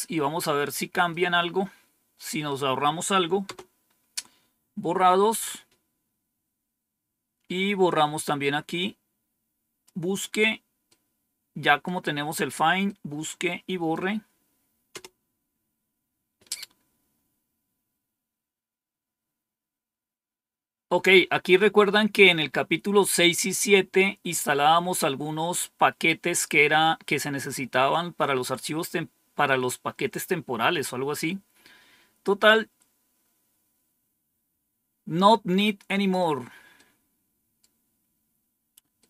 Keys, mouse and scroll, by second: 1.0-2.4 right drag, 3.4 Return, 7.8-9.8 drag, 10.8-11.8 right drag, 12.7-13.9 right drag, 14.8 Return, 17.6-18.3 scroll down 2, 18.3-19.0 scroll down 1, 32.1-36.1 drag, 36.7 right click, 38.9-39.0 right drag.